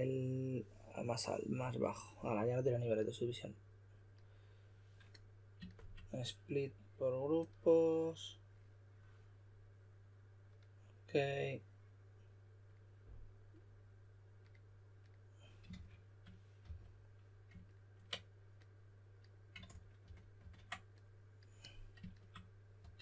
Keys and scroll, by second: 15.7 shift+s, 16.6 w, 19.7 super+d, 20.0 super+d, 20.4 super+d, 22.8 w.